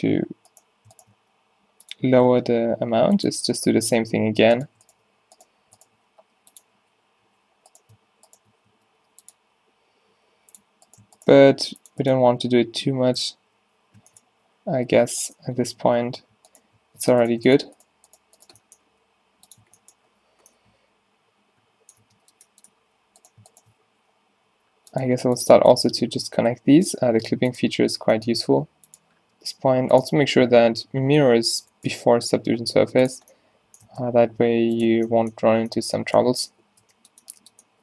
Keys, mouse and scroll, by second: 1.2-3.9 typing, 6.5 g, 6.8 z, 7.3 z, 8.7 s, 9.5 g, 11.4 g, 13.2 g, 13.6 z, 14.3 z, 15.2 z, 15.9 Tab, 16.3 Tab, 18.9 g, 19.7 Tab, 20.4 z, 22.1 Tab, 23.9 z, 24.6 e, 25.1 r, 25.5 g, 27.1 g, 28.5 g, 31.6 Tab, 32.2 Tab, 32.4 g, 33.9 Tab, 34.2 Tab, 34.7 g, 34.9 Tab, 36.6 z, 36.9 Tab.